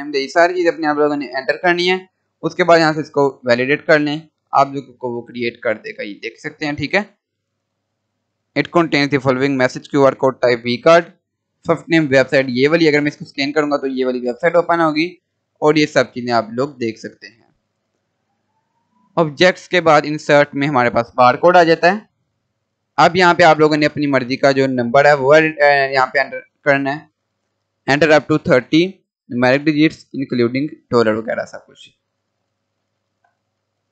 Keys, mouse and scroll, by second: 2.1-3.2 scroll down 1, 3.2 click, 5.4 scroll down 1, 6.6 scroll, 6.6 scroll up 1, 12.8 click, 15.8 click, 17.3 Delete, 18.8 click, 21.8 scroll down 1, 23.2 click.